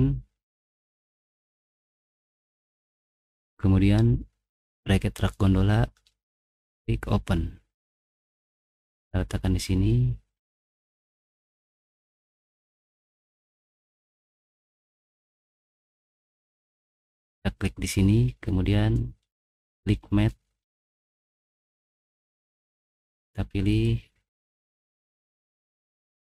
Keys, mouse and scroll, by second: 4.7 click, 6.7 click, 8.9 click, 10.2 middle click, 11.2 middle click, 11.4-12.2 scroll up 4, 12.3 middle click, 13.5-13.8 scroll up 1, 13.9 middle click, 14.6 middle click, 15.7 middle click, 19.4 click, 20.2-21.2 middle drag, 21.3 middle click, 22.3 middle click, 22.8 middle click, 23.2 click, 23.7 middle click, 24.1-25.1 scroll down 3, 25.1 middle click, 25.2 middle click.